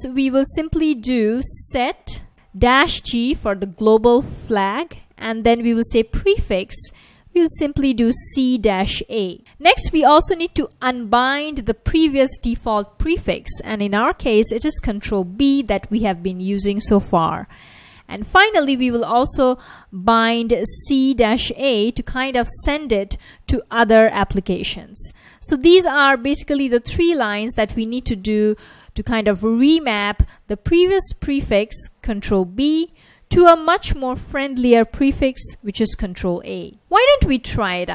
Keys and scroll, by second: 0.9 super+=, 1.2 super+=, 1.3-3.1 typing, 4.6-8.3 typing, 9.3-12.5 typing, 13.7-15.0 typing, 17.1 Return, 17.5-18.9 typing, 20.0-25.2 typing, 25.7 super+s, 36.8 super+Tab, 37.2 super+Tab.